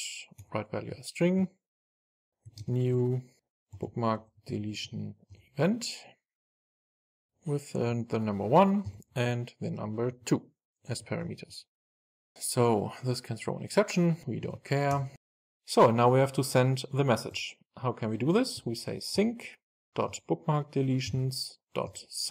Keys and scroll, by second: 0.4 Return, 6.5 Return, 11.2 super+s, 13.4 alt+Return, 19.2 Return.